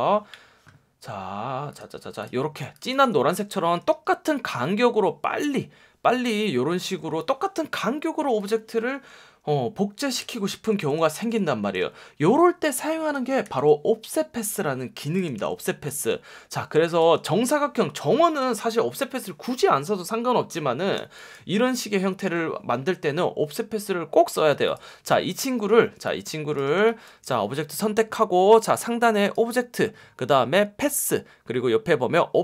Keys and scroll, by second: 2.5 space, 3.0 super+space, 3.9 F1, 6.8 F1, 10.2 BackSpace, 10.6 super+-, 12.7 space, 13.4 v, 14.7 space, 15.3 v, 15.7 space, 20.9 space, 26.8 space, 30.4 F1.